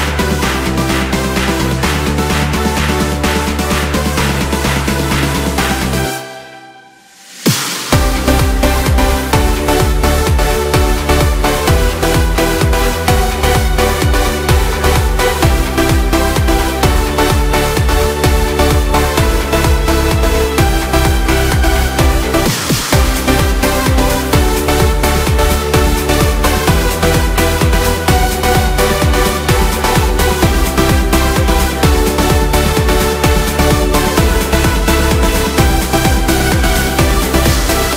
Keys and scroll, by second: 5.4 Return, 16.2 ctrl+shift+n, 18.0 Return, 33.5 ctrl+shift+n, 33.9 Return.